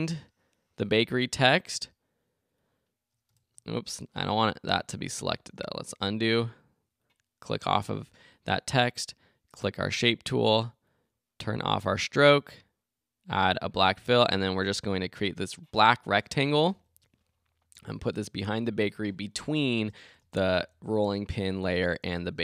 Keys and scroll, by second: 16.5 Left, 20.0 shift+Left, 20.5 shift+Left, 21.9 Left.